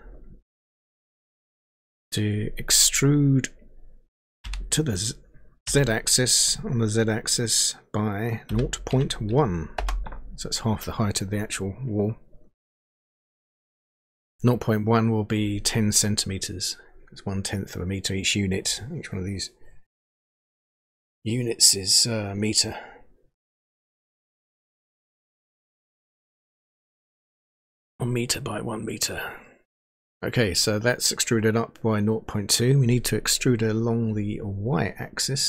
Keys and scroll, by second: 4.6 e, 8.5-9.7 typing.